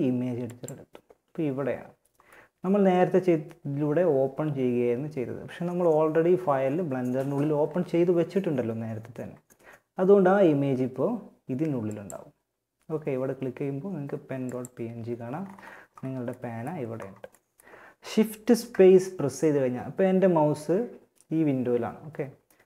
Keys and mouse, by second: 0.2 middle click, 1.9-13.0 middle drag, 14.6-18.5 middle drag.